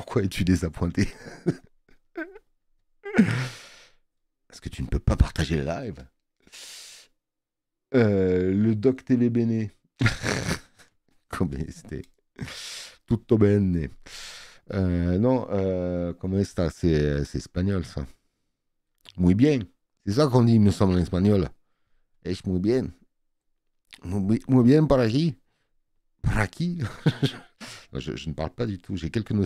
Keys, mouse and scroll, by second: 0.4 space, 0.6 click.